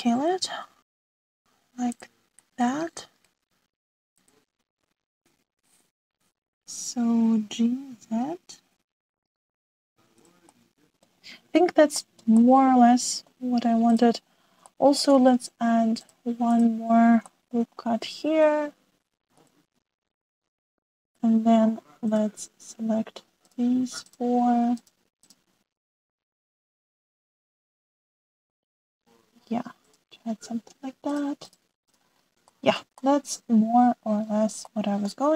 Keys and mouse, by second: 1.9 s, 3.5-4.3 drag, 5.2-8.4 drag, 8.4 g, 10.9 ctrl+z, 11.4-12.0 middle drag, 13.0 shift+click, 13.1 shift+middle click, 13.4-14.3 middle drag, 15.7-17.0 shift+middle drag, 17.0-17.6 drag, 17.6-18.6 middle drag, 18.8-19.8 middle drag, 19.8 ctrl+r, 24.4 click, 27.0 s, 32.0 click, 32.9 click, 33.5 shift+middle click, 34.0-35.1 middle drag.